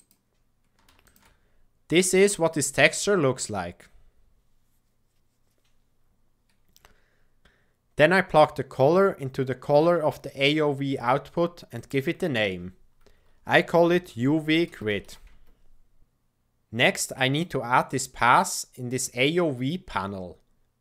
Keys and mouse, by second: 1.6 click, 1.8 middle click, 1.9 click, 2.0 middle click, 2.1 click.